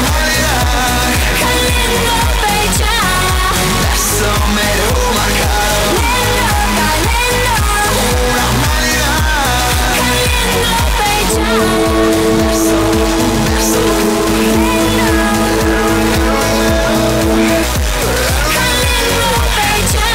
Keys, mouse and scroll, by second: 2.1 Page_Down, 17.6 Page_Down.